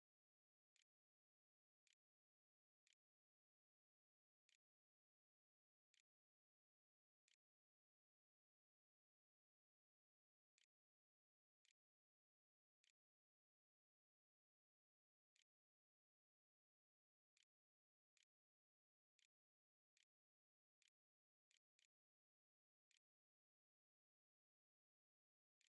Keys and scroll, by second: 0.0-2.7 typing, 3.8-13.7 typing, 15.1 Tab, 15.5-25.4 typing, 18.6 Return, 19.3 shift+Up, 19.4 shift+Return, 25.4 End.